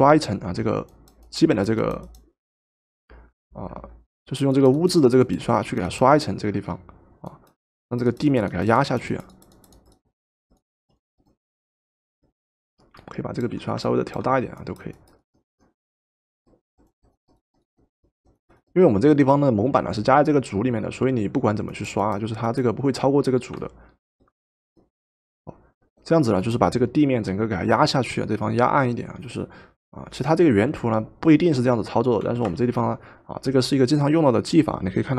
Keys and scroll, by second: 32.3 v.